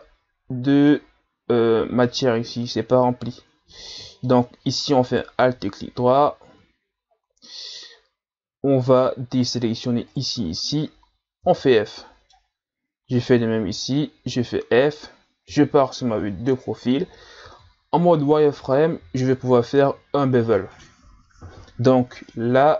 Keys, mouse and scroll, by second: 2.5-3.9 scroll up 1, 3.9-5.2 middle drag, 5.2 alt+right click, 9.4 shift+right click, 10.1 shift+right click, 11.4 f, 11.9-13.2 middle drag, 13.2 alt+right click, 14.3 f, 15.5 KP_3, 16.5-17.1 scroll up 2, 17.5 z, 18.6 right click, 19.0 b.